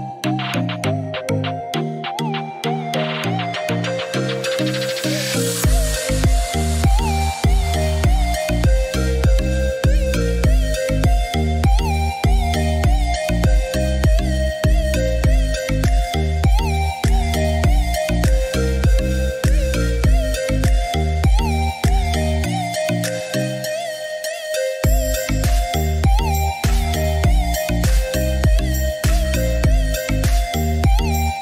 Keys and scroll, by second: 2.3 1, 2.7 BackSpace, 3.3 4, 3.8 0, 4.2 Return, 8.4 Escape.